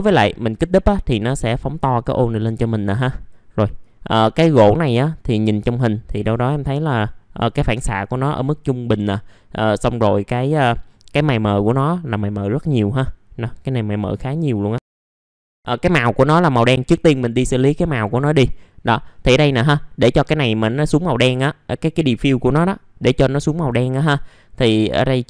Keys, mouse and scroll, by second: 6.2-6.8 scroll down 1, 15.0 click, 16.7 click, 17.6 middle click.